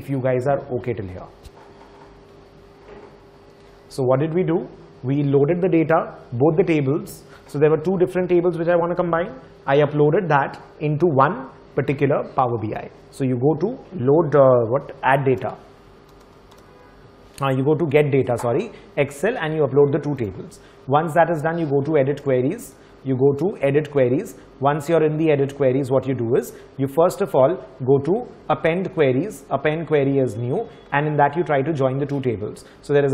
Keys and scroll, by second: 15.3 typing, 15.4 alt+Tab, 16.1 alt+Tab, 16.3-17.2 typing, 24.1 typing.